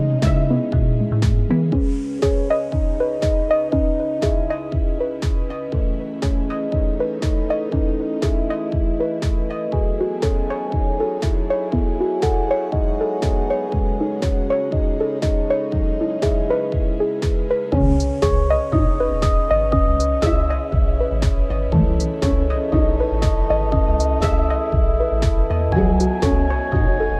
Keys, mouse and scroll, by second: 0.2 ctrl+r, 0.5 ctrl+r, 1.2 ctrl+r, 1.8 ctrl+r, 2.6 ctrl+r, 2.8 ctrl+r, 3.5 ctrl+r, 3.9 ctrl+r, 4.6 a, 4.7 Tab, 7.6-8.3 scroll up 3, 8.3-10.8 drag, 11.5 click, 12.4 KP_0, 12.9-14.0 right drag, 14.0 click, 15.8 Tab, 16.0 a, 16.4 click, 16.7 Tab, 16.9 right click, 17.7 right click, 18.0 drag, 18.9-20.6 drag, 21.4 Tab, 21.7 click, 21.9 Tab, 21.9 right click, 22.2-22.6 scroll up 3, 23.2 click, 23.7 Tab, 23.8 right click, 24.1 scroll down 1, 24.3 right click, 24.8 shift+d, 26.1 Tab, 26.3 right click, 26.5-26.9 scroll up 3, 26.9 shift+middle click.